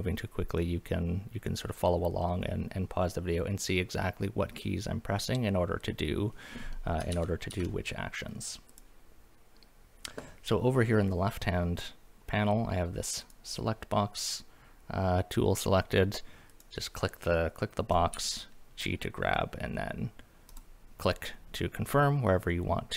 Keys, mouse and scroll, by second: 7.1 ctrl+z, 7.5 ctrl+z, 8.7 click, 13.2 click, 16.5 click, 18.1 g, 20.5 click.